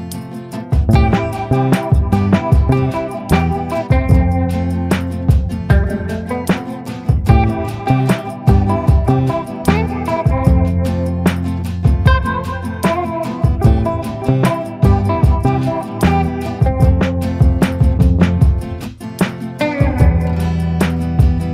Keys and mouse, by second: 0.3 shift+middle click, 1.4 middle click, 2.4 shift+middle click, 3.3 middle click, 4.5 shift+middle click, 5.1-7.2 shift+middle drag, 9.3 click, 10.3 ctrl+i, 10.9 b, 11.3 click, 12.1 b, 13.3-14.5 middle drag, 14.5 a, 15.0 middle click, 15.9 middle click, 16.9 ctrl+i, 17.6 b, 18.7 middle click.